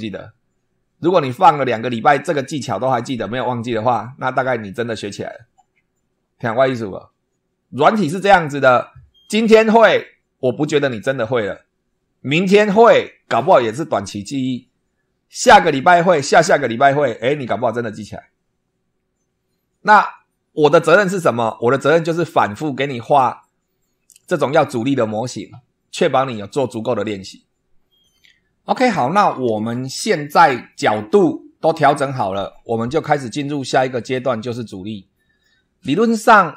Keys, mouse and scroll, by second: 29.5 super+2, 30.5 scroll up 2, 31.0 scroll down 2.